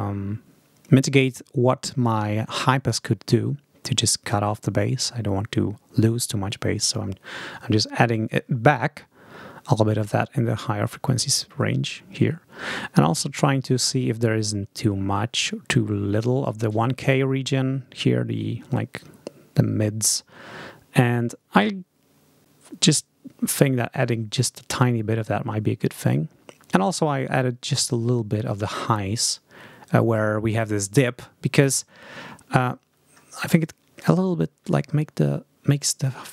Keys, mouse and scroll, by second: 34.0 ctrl+scroll down 2.